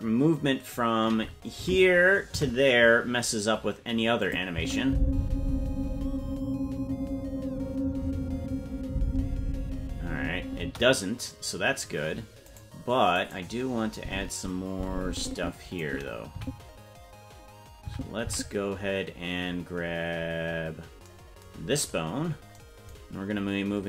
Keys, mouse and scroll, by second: 1.6 Left, 2.3 Right, 4.2 click, 4.5 space, 10.6 space, 12.5 right click, 13.2 right click, 13.9-15.8 drag, 16.3 Right, 17.9 Right, 18.3 Left, 19.3-20.0 scroll down 4, 20.0-20.8 scroll down 6, 21.5-22.5 scroll down 6.